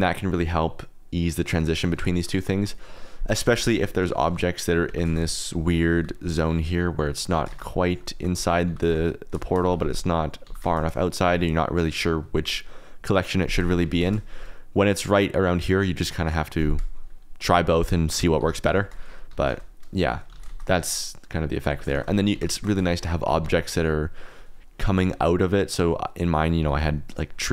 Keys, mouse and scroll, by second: 2.1 click, 3.2 click, 3.5-10.7 typing, 4.7 click, 5.7 click, 7.0 drag, 8.5 click, 9.4 shift+click, 10.2 click, 11.1 shift+click, 13.9 alt+d, 14.0 shift+z, 15.3-16.4 drag, 18.1 click, 18.3 g, 19.4 alt+d, 19.5 shift+z, 19.8 click, 20.3 alt+d, 20.5 shift+z, 21.1 click, 21.7-23.4 typing, 22.9 shift+click, 23.6-24.7 drag, 24.8 alt+d, 25.0 shift+z, 25.4 click, 26.6 g, 26.8 x, 27.1 click.